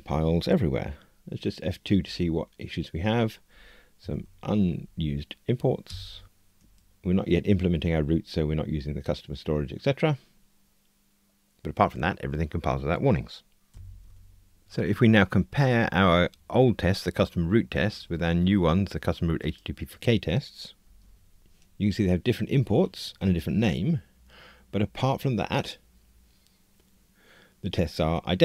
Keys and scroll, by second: 2.0 F2, 6.5 F2, 20.8 super+d, 21.1 shift+super+F12.